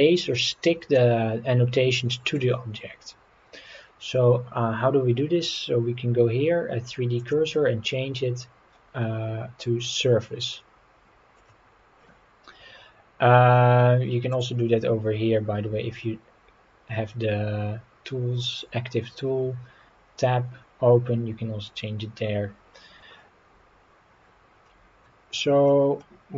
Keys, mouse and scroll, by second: 1.0-2.4 middle drag, 7.2-11.5 drag, 14.3 click, 24.6 middle click, 25.2-25.5 scroll up 3, 26.0 middle click, 26.0 scroll up 1.